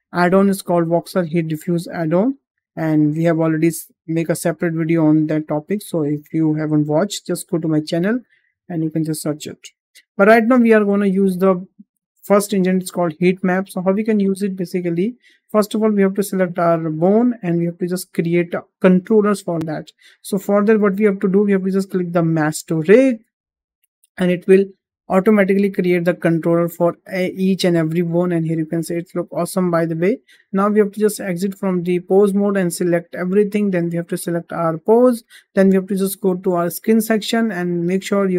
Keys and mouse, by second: 4.3-9.6 drag, 10.4-10.7 drag, 12.1-13.9 drag, 17.1 click, 25.2-27.9 middle drag, 28.5 shift+middle drag, 28.7-29.9 middle drag, 30.5 click, 31.0 click, 32.4-32.7 drag, 33.9 shift+click, 34.5 shift+click, 35.1 shift+middle drag, 36.5 click.